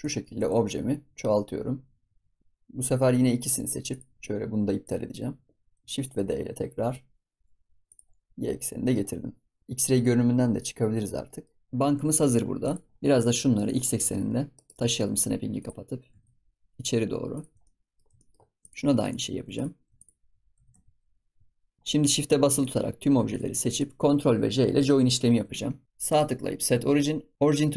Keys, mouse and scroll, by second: 0.1 shift+d, 3.3 shift+click, 3.8 shift+click, 4.2 ctrl+click, 6.1 shift+d, 8.2-8.5 scroll down 2, 8.5-9.0 middle drag, 9.0-9.3 scroll up 4, 9.3 scroll down 3, 9.6 middle click, 10.5 click, 10.9 scroll down 1, 11.1-11.6 middle drag, 11.4-12.0 scroll up 7, 12.0-12.6 scroll down 10, 12.6 click, 12.8 scroll up 6, 13.1 click, 13.6 shift+click, 13.9 g, 15.5 click, 17.6 middle click, 18.5 click, 18.9 click, 19.5 click, 19.9 shift+click, 20.5 g, 21.8-22.6 scroll up 2, 22.6 shift+click, 23.2 shift+click, 23.6 shift+click, 24.8 ctrl+j, 25.8-27.3 right drag.